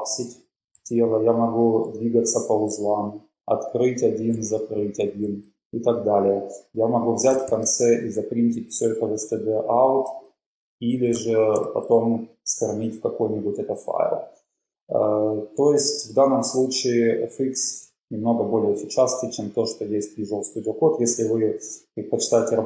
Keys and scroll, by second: 0.0-3.0 typing, 7.6 shift+p, 11.4 typing.